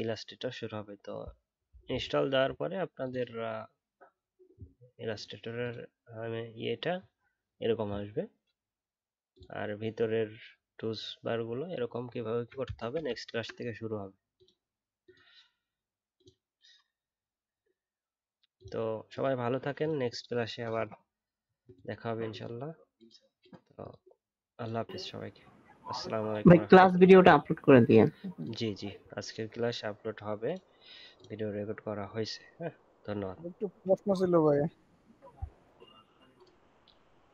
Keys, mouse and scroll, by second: 10.9 alt+scroll down 1, 12.2 alt+scroll up 1, 13.2-13.5 alt+scroll down 3.